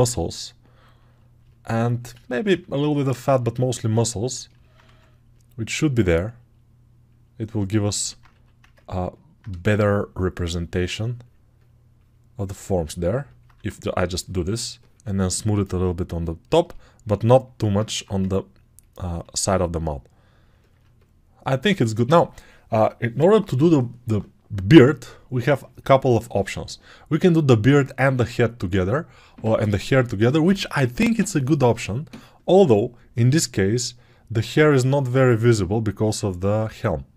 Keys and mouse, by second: 8.6 ctrl+alt+right click, 8.7 ctrl+alt+click, 8.8-14.9 alt+right drag, 13.4 2, 14.9-37.1 shift+drag.